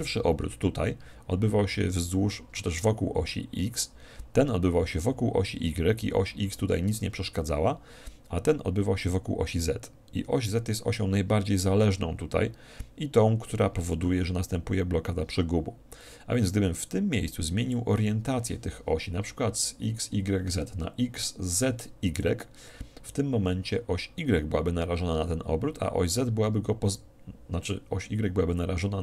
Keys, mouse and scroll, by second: 0.0-1.8 drag.